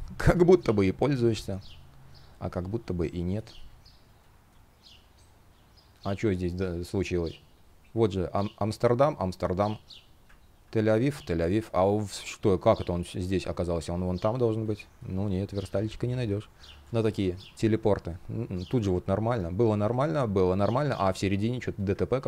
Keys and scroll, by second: 2.6 shift+o, 3.0 space, 14.4 space, 16.4 space, 18.9 shift+p, 21.8 super+z.